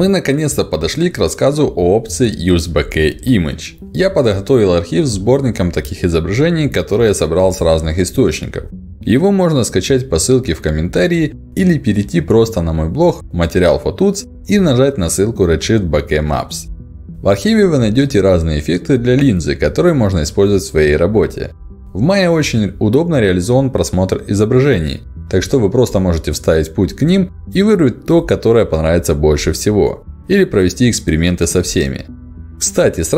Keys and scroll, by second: 21.6 Return, 23.0 Up, 24.1 ctrl+alt+d, 26.8 Down, 29.1 Up.